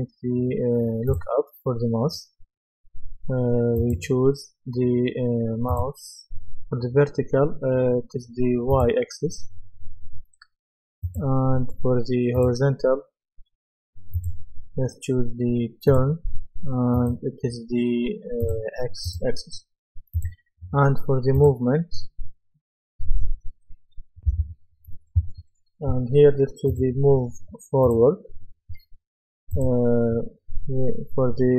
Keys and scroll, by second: 24.3 F10.